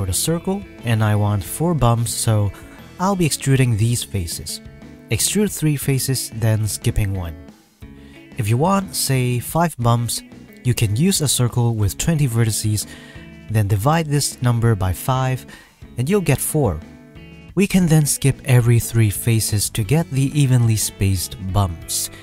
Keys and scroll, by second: 2.3 e, 9.0 Tab, 9.6 e, 10.1 e, 10.5 e, 10.7 m, 11.2 ctrl+z, 11.3 ctrl+z, 11.6 ctrl+z, 11.8 e, 12.1 e, 12.1 m, 19.9 ctrl+z.